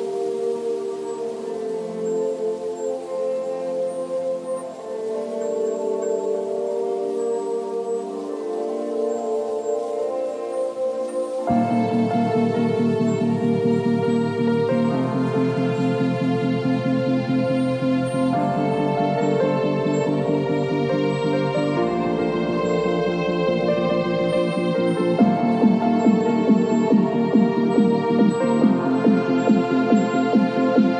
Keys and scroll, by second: 1.0 l, 3.9 ctrl+c, 4.2 ctrl+w, 6.0 v, 6.3 space, 7.8 ctrl+v, 8.1 ctrl+t, 12.6 space, 17.6 space, 20.2 ctrl+l, 22.9 Return, 26.5 b.